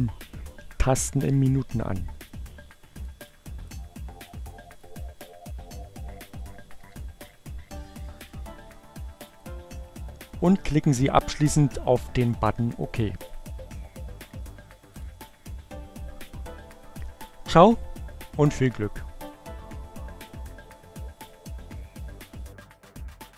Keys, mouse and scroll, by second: 2.7 click, 4.1 click, 5.4 5, 8.9 click, 12.9-15.2 drag.